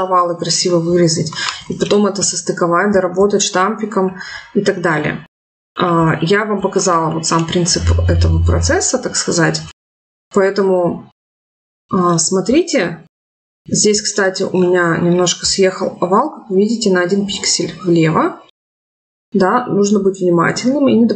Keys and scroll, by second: 4.5 ctrl+z.